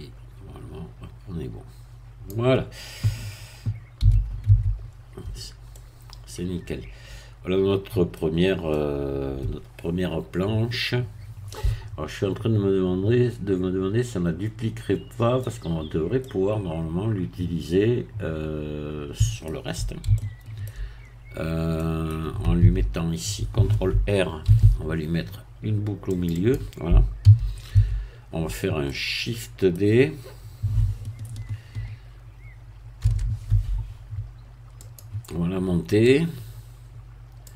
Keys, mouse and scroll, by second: 4.0 z, 4.4 Tab, 4.8-5.7 scroll down 2, 5.7-8.2 middle drag, 8.2 scroll down 1, 8.7-15.6 middle drag, 15.6 scroll down 1, 16.2-20.0 middle drag, 20.1 shift+middle click, 20.2 shift+scroll down 1, 21.1-21.8 shift+scroll up 1, 21.8 middle click, 22.6 Tab, 24.4 ctrl+r, 26.1-27.2 drag, 27.2 a, 27.7 Tab, 28.8-29.9 middle drag, 33.0 shift+d, 34.8 click, 36.0-37.5 drag.